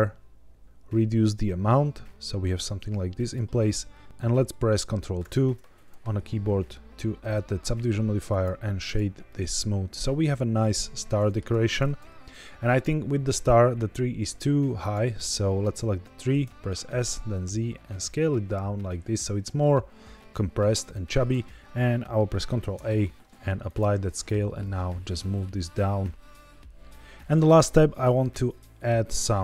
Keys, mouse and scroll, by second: 0.6-3.3 shift+drag, 5.1 ctrl+2, 7.1-8.3 right drag, 8.7 click, 9.2-11.3 middle drag, 11.9 KP_1, 14.7 click, 16.3 s, 16.9 z, 20.7 click, 22.5 ctrl+a, 24.1 click, 24.6 g, 24.6 z, 27.1 click.